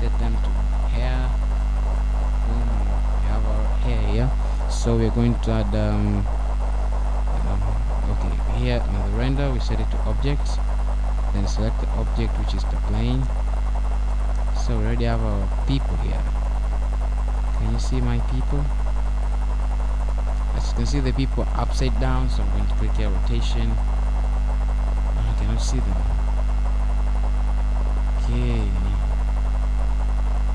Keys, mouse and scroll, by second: 1.7 click, 3.0 click, 5.4 click, 8.0-8.6 scroll down 2, 9.0 middle click, 15.5 click, 16.5 click, 20.2 scroll down 1, 20.4 middle click, 23.3-24.3 scroll up 3, 24.8-25.8 scroll up 3, 25.8 middle click, 28.8 click, 30.1-30.4 scroll down 1, 30.4 middle click.